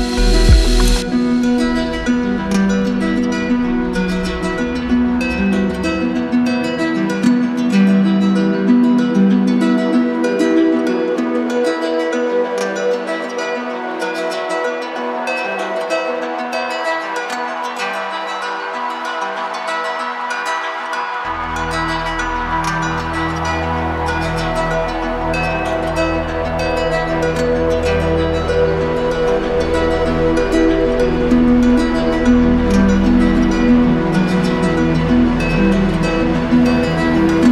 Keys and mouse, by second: 1.2-2.3 drag, 10.7-11.8 drag, 13.9-15.0 drag, 17.7 click, 20.8 click, 22.5 click, 22.8 shift+click, 28.8 click.